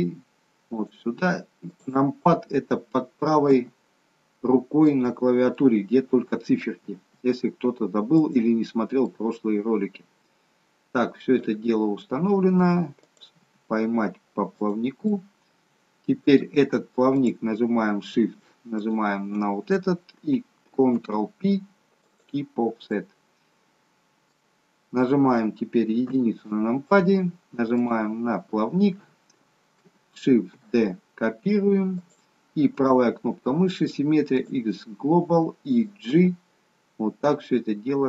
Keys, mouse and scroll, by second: 1.7 click, 3.6 g, 5.5 middle click, 6.8 g, 9.0 middle click, 13.1 click, 13.5 g, 15.0 middle click, 17.1 click, 18.7 shift+click, 20.9 ctrl+p, 22.9 middle click, 26.1 KP_1, 27.7 click, 30.3 shift+d, 32.8 right click, 36.0 g.